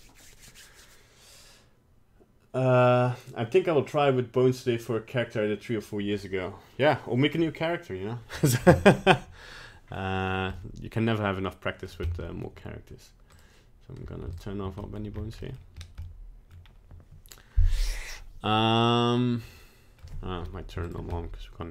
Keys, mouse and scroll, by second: 9.0 middle click, 10.2 scroll down 2, 10.6 middle click, 11.1 middle click, 11.5 middle click, 11.8 middle click, 12.1 middle click, 12.4 middle click, 13.3 click, 14.3 shift+click, 14.8 middle click, 15.0 middle click, 15.1-16.0 scroll up 4, 15.4 middle click, 16.0 middle click, 16.5-17.3 scroll down 2, 19.6 middle click, 19.6 middle click, 20.8 shift+click, 21.1 middle click.